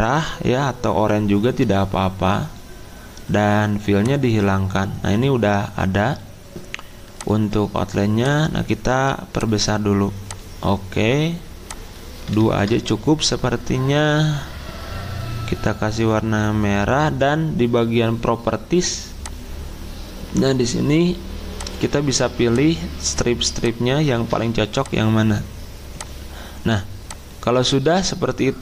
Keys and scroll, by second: 12.4 2, 12.6 Return, 27.6 ctrl+z.